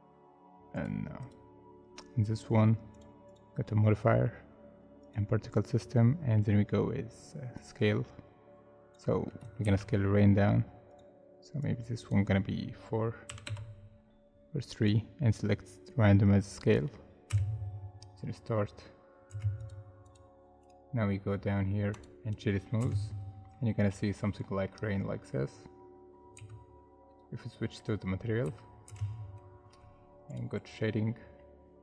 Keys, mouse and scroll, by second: 1.2 double click, 5.9-6.4 scroll down 1, 9.7 ctrl+z, 13.3 4, 13.4 Return, 17.3 space, 19.3 space, 20.0 double click, 20.6 right click, 22.8 space, 23.5 middle click, 26.3 z, 28.9 space, 31.3 scroll up 1, 31.6-31.8 scroll down 1.